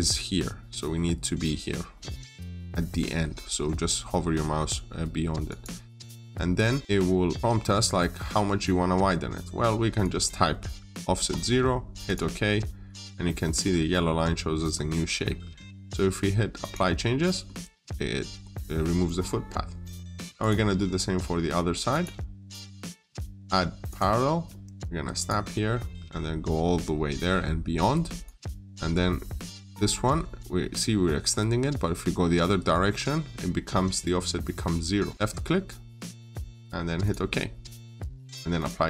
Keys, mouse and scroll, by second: 5.3 click, 6.1-6.4 scroll down 1, 6.4 middle click, 9.8 click, 11.0 typing, 11.9 click, 12.7-13.0 scroll up 1, 14.5 scroll down 1, 14.7 middle click, 16.4 click, 16.9 scroll down 1, 17.1 middle click, 20.2 click.